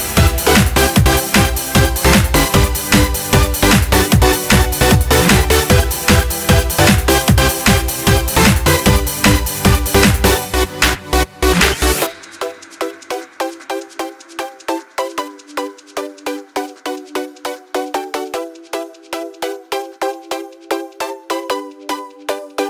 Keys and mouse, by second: 10.2 click, 10.9 click, 19.7-21.4 drag.